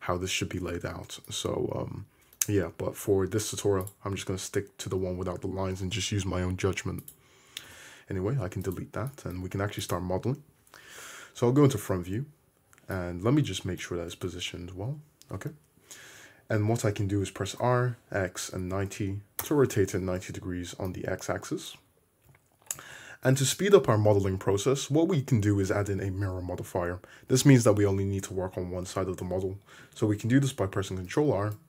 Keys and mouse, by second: 1.3-3.9 middle drag, 3.9-9.9 drag, 7.7 x, 9.9-11.7 middle drag, 11.5 `, 14.1 `, 14.8 `, 17.6 r, 21.8 `, 22.3 `, 23.0 `, 28.5 Tab, 31.2 ctrl+r.